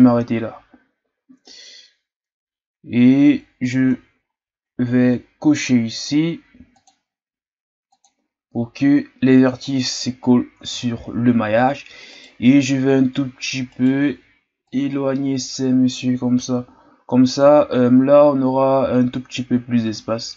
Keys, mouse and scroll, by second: 2.7-3.1 ctrl+scroll down 1, 3.1-3.7 scroll up 4, 3.7 Tab, 4.2-6.7 scroll up 2, 6.7-8.0 drag, 9.6 click, 10.9-12.1 scroll down 1, 12.1 right click, 12.8-13.7 scroll down 2, 13.7 shift+right click, 14.6-18.0 drag, 18.0-19.1 scroll up 4.